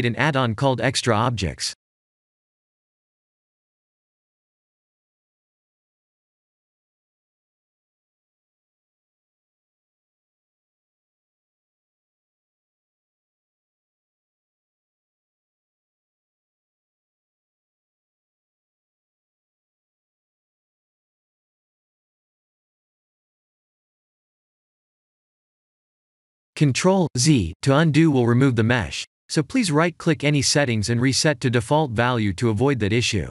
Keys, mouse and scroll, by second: 9.4 middle click, 10.5 KP_7, 11.3-12.2 scroll up 1, 12.5-13.1 scroll up 2, 13.2 click, 13.2 KP_7, 15.6 click, 20.7-21.3 scroll down 2, 22.0 middle click, 22.0 scroll down 1, 27.0 click, 32.2 click.